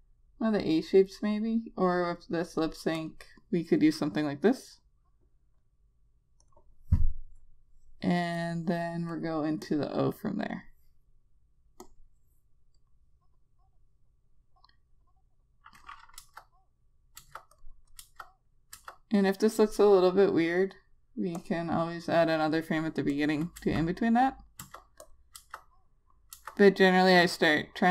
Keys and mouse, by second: 3.3 click, 16.5 Return, 17.5 Return, 17.8 click, 18.3 Return, 19.0 Return, 19.5 click, 23.9 Return, 24.9 Return, 25.3 click, 25.7 Return, 26.6 Return.